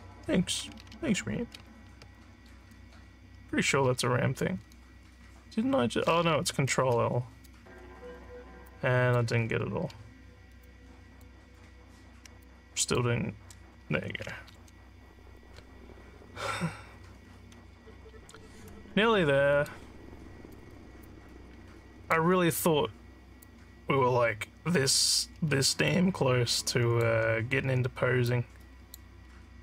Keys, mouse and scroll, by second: 8.6 shift+click, 10.7 shift+click, 12.4 shift+click, 19.5 click, 21.1-22.1 alt+drag, 23.4-24.9 drag, 25.8-27.0 alt+drag, 28.2 click.